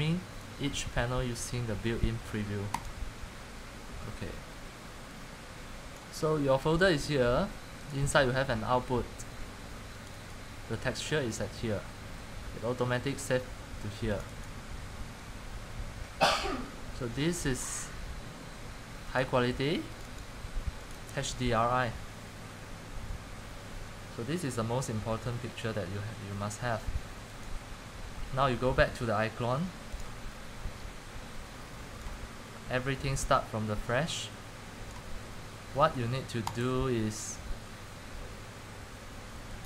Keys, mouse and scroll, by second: 2.9 click, 10.5 click, 14.4 click, 14.5 click, 19.4 click, 20.1 click, 20.3 click, 21.0 click, 21.3 click, 27.5 click, 31.8 click, 32.4 click, 36.6-39.6 drag.